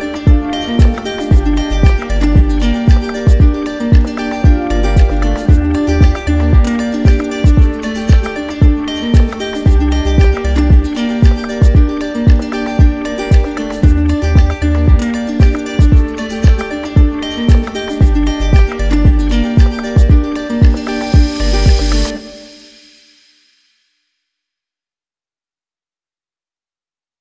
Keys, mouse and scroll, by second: 1.0 click, 2.4 right click, 2.7 ctrl+z, 7.9 click, 8.0 ctrl+z, 21.2 click, 23.4 shift+click, 23.9 d, 25.2 shift+click, 25.4 d.